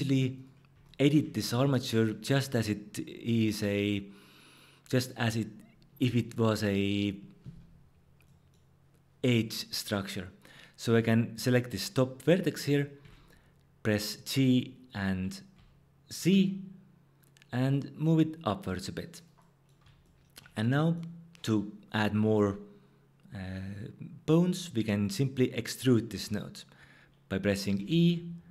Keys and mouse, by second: 0.3 click, 13.0 g, 15.5 z, 19.1 click, 27.8 e.